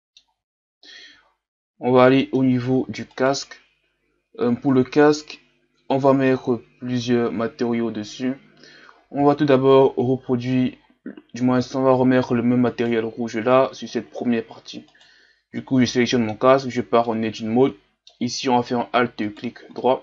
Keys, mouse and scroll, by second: 0.6-1.3 scroll down 3, 1.3-2.2 scroll up 4, 2.2 middle click, 2.5-3.1 scroll up 1, 3.1 right click, 11.7-12.7 scroll up 1, 12.7-15.6 right drag, 15.6-16.1 scroll up 2, 16.1 middle click, 16.5 scroll up 1, 16.7 Tab, 17.1-19.3 middle drag, 19.3 alt+right click, 19.8-20.0 middle drag.